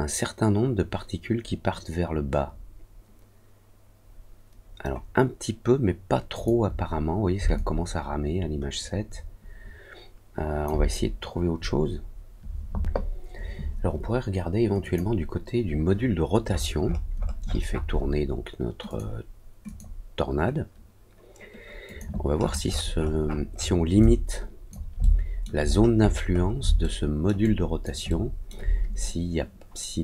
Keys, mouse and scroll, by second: 6.3 click, 7.5-10.6 alt+drag, 14.7 click, 16.4 middle click, 16.7 middle click, 17.1 middle click, 17.5 middle click, 17.7 middle click, 18.8 click, 19.6 click, 21.8 click, 22.3 middle click, 22.4-23.1 scroll up 3, 23.1 scroll down 1, 23.2-23.7 scroll up 2, 23.9 alt+click, 24.9 alt+middle click, 25.6-26.5 scroll down 3, 26.7 alt+middle click, 27.3 alt+click, 28.0 alt+middle click.